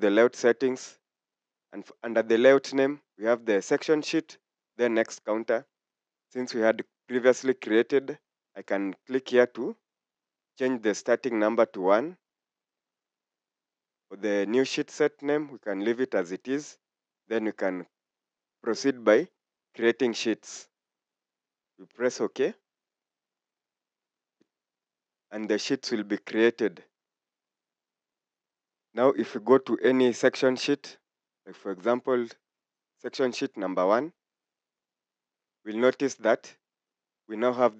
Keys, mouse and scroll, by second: 11.5 1, 19.5 typing, 28.4 Escape, 35.5 scroll down 1.